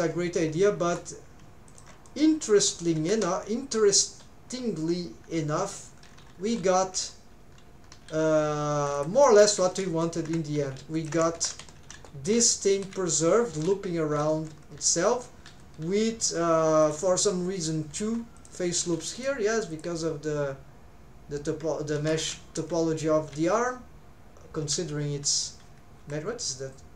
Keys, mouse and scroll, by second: 16.1 middle click, 22.0 middle click.